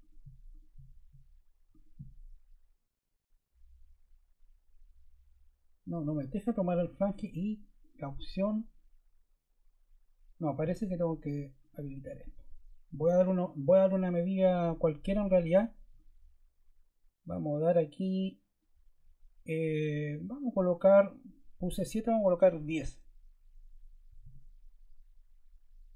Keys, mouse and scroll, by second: 23.9-24.6 typing.